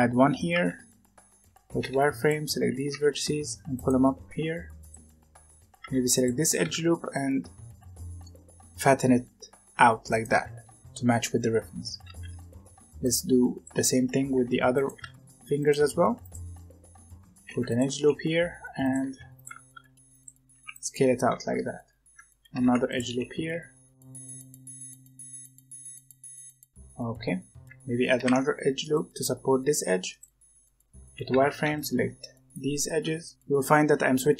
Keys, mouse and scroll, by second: 0.5 alt+a, 1.3 z, 1.7 b, 2.5 z, 2.8 g, 4.2 s, 5.8 alt+a, 6.0 alt+click, 6.5 s, 10.4 z, 12.0 alt+a, 12.4-15.7 typing, 17.3 ctrl+r, 18.2 s, 18.9 g, 19.6 s, 20.5 g, 21.2 alt+a, 22.4 ctrl+r, 23.4-26.1 typing, 24.7 alt+a, 28.1 ctrl+r, 30.9 z, 31.2 alt+a, 31.6 b, 32.9-34.3 typing.